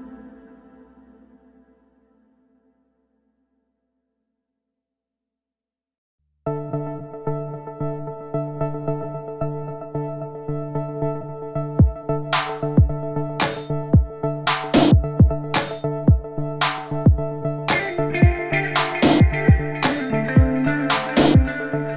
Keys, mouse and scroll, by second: 0.1 alt+shift+click, 0.2 middle click, 0.4 scroll up 3, 0.5 shift+drag, 0.8 shift+click, 0.9 middle drag, 1.3 ctrl+e, 1.6 scroll down 3, 1.7-2.1 shift+middle drag, 2.1 scroll up 1, 2.3 alt+click, 2.4 ctrl+e, 2.6 shift+middle click, 2.7 scroll up 1, 2.8-3.4 middle drag, 3.4 scroll down 4, 3.4 middle drag, 3.5 scroll up 3, 3.6 middle drag, 3.8 click, 3.8-4.1 middle drag, 4.1 ctrl+e, 4.3 scroll down 1, 4.3-4.9 middle drag, 4.9 ctrl+z, 4.9 click, 5.1 ctrl+e, 5.2 scroll down 1, 5.3-6.4 middle drag, 6.4 alt+click, 6.5-7.4 shift+middle drag, 7.4 ctrl+e, 7.6 middle click, 8.0 scroll down 1, 8.0 shift+middle drag, 8.2 scroll up 1, 8.3-9.1 shift+middle drag, 9.6 scroll down 1, 9.7 shift+middle click, 10.2 shift+click, 10.3 ctrl+e, 10.5 scroll down 1, 10.6 shift+middle click, 10.6-11.2 scroll up 4, 10.7 shift+middle click, 11.2 click, 11.3 ctrl+e, 11.5 scroll down 2, 11.5 shift+middle drag, 11.9 shift+middle click, 12.2 shift+click, 12.3 shift+middle click, 12.7 shift+click, 12.8 ctrl+e, 13.1-18.2 typing, 13.6 click, 14.9 click, 15.1 shift+middle click, 15.4 scroll down 3, 15.4 shift+middle click, 15.5 scroll up 2, 15.6 click, 16.3 scroll down 1, 16.4 shift+middle click, 16.6 click, 16.9 click, 17.2 shift+middle click, 17.4 scroll down 3, 17.5 click, 17.6 shift+middle click, 17.6 scroll up 2, 18.3 Tab, 18.4-19.3 middle drag, 19.3 click, 19.6 g, 19.7-20.0 middle drag, 20.0 Tab, 20.1-20.7 shift+middle drag, 20.7 KP_Decimal, 20.8 KP_3, 20.9 scroll up 1, 21.0 shift+middle click, 21.2 a, 21.2 click, 21.4 ctrl+s.